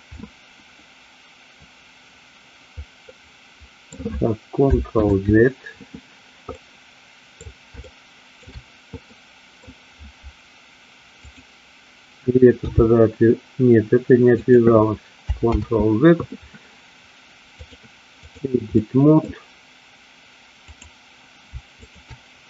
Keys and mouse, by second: 3.1 middle click, 5.1 ctrl+z, 6.6 middle click, 7.9 shift+middle click, 9.1 middle click, 11.2 click, 12.8 g, 15.8 ctrl+z, 17.8 click, 18.8 middle click, 21.9 shift+click.